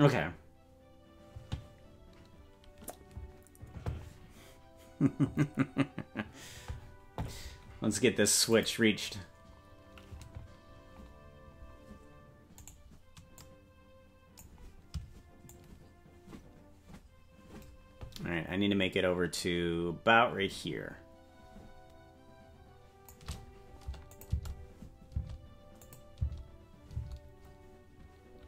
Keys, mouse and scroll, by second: 1.1-2.1 scroll up 1, 8.5 click, 11.3-12.7 scroll down 1, 12.7 right click, 13.3-14.4 drag, 15.5-23.1 shift+drag, 24.1-25.3 drag, 24.2 space, 25.3 space, 25.8 click, 26.1 space.